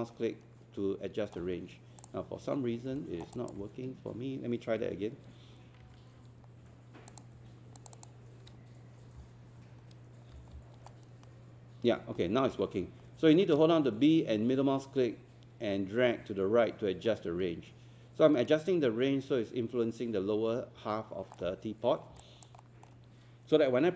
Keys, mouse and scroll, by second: 2.0 click, 2.5 scroll up 1, 3.3 click, 4.8 q, 7.1 click, 7.8 shift+click, 9.2-9.9 typing, 10.9 middle click, 11.0 typing, 19.4 middle click, 21.3 middle click, 21.8 scroll down 1, 22.2 alt+click, 22.6 alt+middle click.